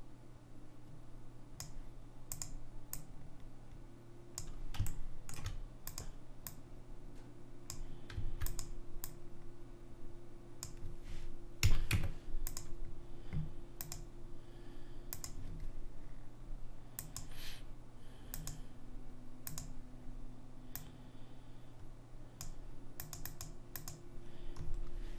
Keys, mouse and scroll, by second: 2.5 click, 5.1 middle click, 6.1 click, 6.1 middle click, 8.6 click, 11.8 a, 12.0 Tab, 13.9-20.3 drag, 20.9 click.